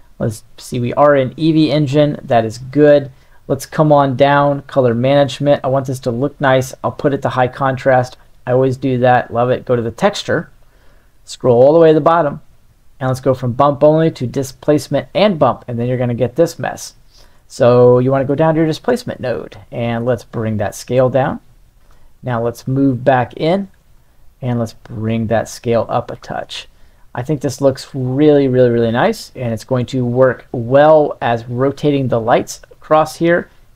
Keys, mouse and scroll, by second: 0.0 click, 4.5 drag, 6.1-7.4 drag, 13.0-14.5 drag, 15.9-16.7 middle drag, 17.5 middle click, 19.2 middle click, 19.9-21.8 shift+drag, 22.9-23.5 middle drag, 24.6-26.1 shift+drag, 26.5-28.6 middle drag, 29.6 middle drag, 30.4-33.7 drag.